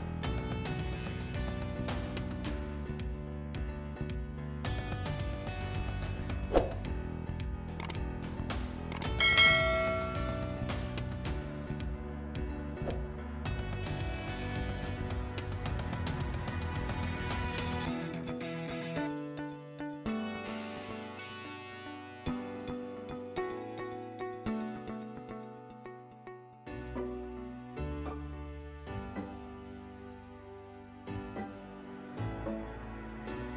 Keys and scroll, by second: 30.7 Escape.